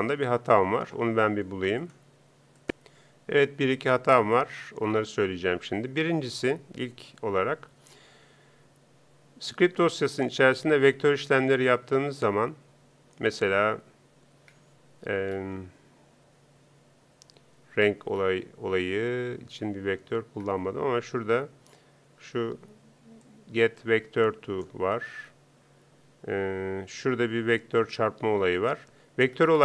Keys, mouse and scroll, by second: 2.6 p.